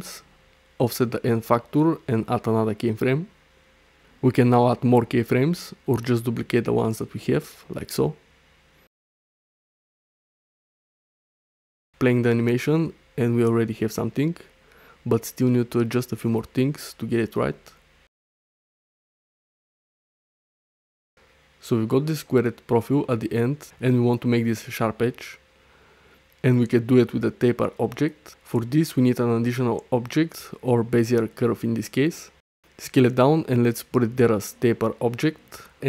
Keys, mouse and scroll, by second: 1.2-2.7 drag, 3.6 i, 5.1 click, 6.1 shift+d, 7.3-7.7 drag, 7.9 shift+d, 9.5 click, 10.0 shift+d, 12.4 space, 14.6 middle click, 15.3 shift+middle click, 15.6 middle click, 16.1 middle click, 16.8 middle click, 17.0 middle click, 18.6 space, 19.2 middle click, 19.9-21.5 drag, 22.7 shift+a, 28.4 shift+a, 30.5 s, 32.0 click, 32.9 click.